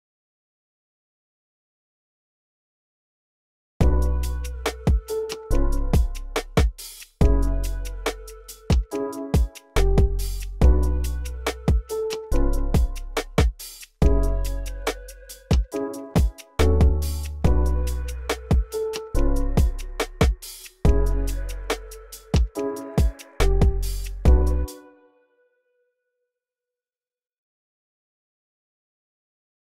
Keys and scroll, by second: 0.5-1.4 typing, 1.9 super+a, 2.6 ctrl+super+r, 3.1 super+a, 3.3 typing, 4.2 alt+super+s, 4.6 x, 5.4 x, 7.4 x, 7.8 x, 13.6 t, 14.8 t, 15.4 alt+super+l, 15.8 y, 16.4 y, 17.6 super+z, 19.0 super+r, 19.1 super+r, 22.6-24.4 typing.